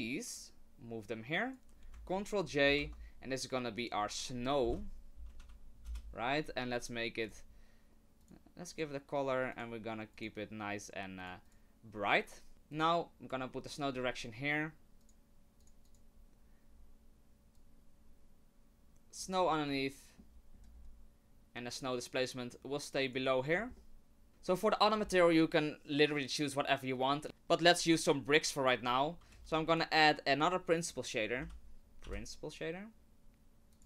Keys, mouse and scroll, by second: 0.4 click, 2.6 ctrl+j, 3.8 click, 7.3 click, 8.3 click, 8.8 click, 9.5 click, 10.1 click, 11.5 click, 12.5 middle click, 12.5 scroll up 1, 12.9 click, 15.1 click, 15.6 click, 15.9 click, 17.5 click, 19.4 scroll down 4, 19.8 shift+middle click, 20.5-21.7 scroll up 5, 21.7 click, 21.7 scroll up 1, 23.5-24.2 scroll down 5, 23.8 middle click, 24.3 click, 24.3 shift+a, 27.2 click, 27.2 right click, 27.2 shift+a, 29.3 shift+a.